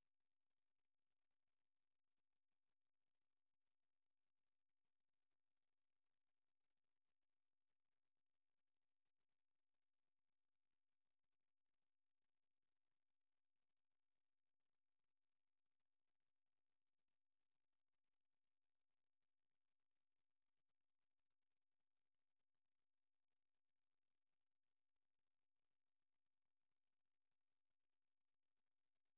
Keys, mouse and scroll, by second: 1.9 click, 4.1-5.4 drag, 6.5 shift+middle click, 6.6-8.5 shift+drag, 8.5 shift+middle click, 8.6 shift+click, 9.0 shift+middle click, 9.3-10.0 shift+scroll up 1, 15.5 click, 27.3 click, 29.1 click.